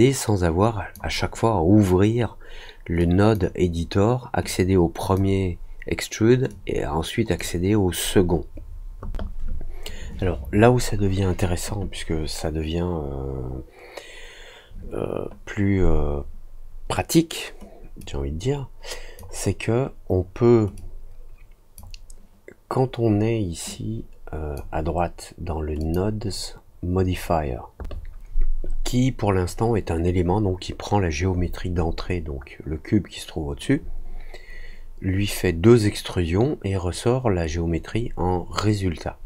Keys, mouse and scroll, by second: 2.9-3.3 drag, 4.4 click, 6.4 click, 17.9-19.1 drag, 20.7-21.7 drag, 23.6 click, 25.7 click.